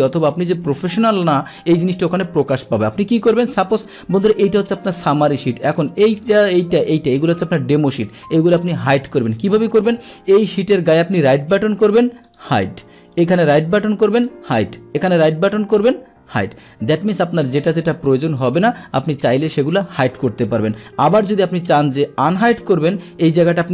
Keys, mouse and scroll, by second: 0.7 click, 3.7 click, 5.8 click, 6.3 click, 6.8 click, 12.2 click, 13.1 right click, 14.1 click, 15.0 right click, 17.3 click, 18.0 click, 23.3 right click.